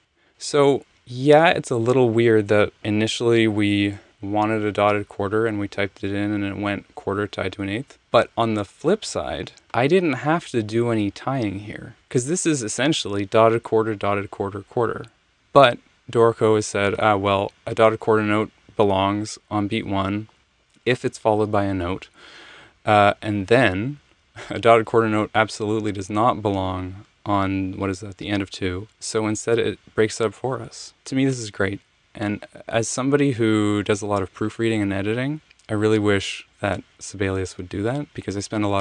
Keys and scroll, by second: 0.0 alt+super+Up, 0.4 Return.